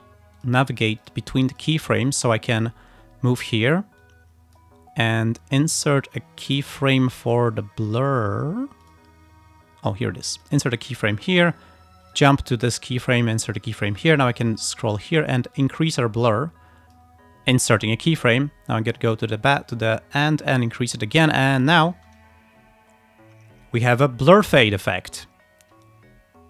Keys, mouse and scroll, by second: 0.4 click, 1.1 click, 1.6 click, 4.1 click, 6.1-7.6 drag, 7.9 scroll up 1, 8.9 click, 10.4 click, 12.2 click, 13.5 click, 14.5 click, 15.6-17.2 drag, 18.8 click, 20.3 click, 21.5 click, 22.0 space.